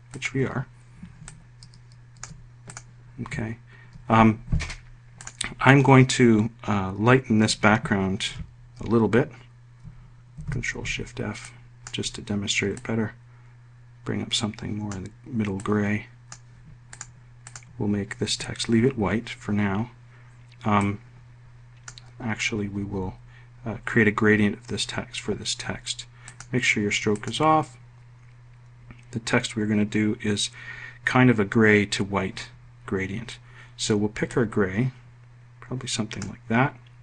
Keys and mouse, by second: 10.6 ctrl+shift+f.